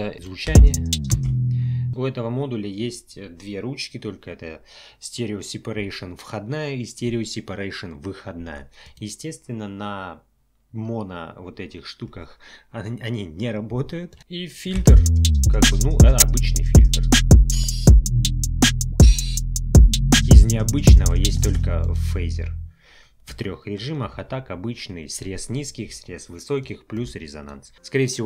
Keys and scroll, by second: 0.4 space, 14.8 space, 21.4 space.